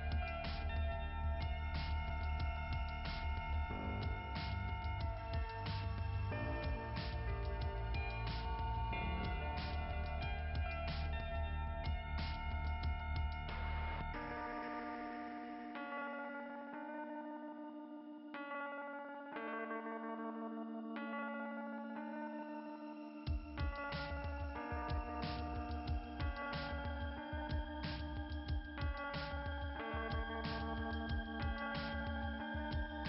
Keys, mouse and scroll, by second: 2.9 click, 3.4 click, 3.6 click, 4.4 right click, 6.6 click, 9.3 click, 10.4 click, 11.6 click, 11.9 click, 12.1 click, 12.4 click, 12.7 click, 15.0 click, 16.4 click, 17.9 scroll down 2, 21.3 click, 22.1 click, 24.0 click, 25.9 click, 27.7 click, 28.2 click, 29.3 click.